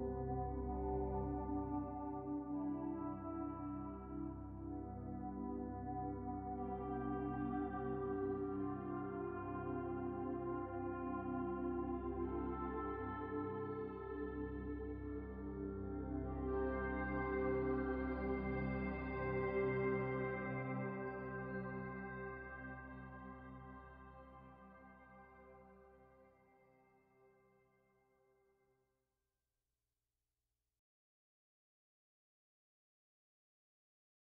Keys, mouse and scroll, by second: 0.8 click, 1.9 shift+click, 3.4-4.1 middle drag, 4.1 shift+click, 4.6-7.0 shift+middle drag, 7.0 ctrl+j, 9.2 ctrl+z, 10.4 click, 11.3 click, 12.3-13.9 drag, 14.5 shift+click, 15.2 shift+click, 16.5 ctrl+j, 17.1-18.8 right drag, 19.2 Tab, 20.3 u, 22.9 Tab, 23.3-23.6 scroll up 2, 23.6-24.9 middle drag, 24.9-26.6 right drag, 27.1 click, 27.9 middle click, 28.5-29.3 scroll up 2, 29.3 middle click, 30.1 scroll down 3, 32.4-34.3 drag.